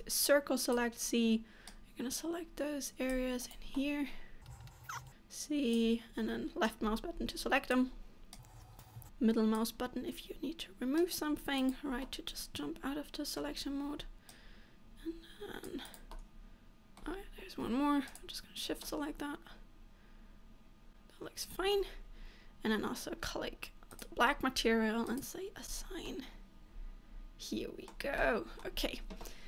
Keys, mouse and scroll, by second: 3.9 middle click, 4.7 middle click, 5.0 c, 12.1 middle click, 14.0 c, 16.3 middle click, 18.2 shift+click, 18.9 middle click, 26.0 click, 26.0 scroll down 3, 26.2 middle click, 28.3 middle click, 28.9-29.4 scroll up 1.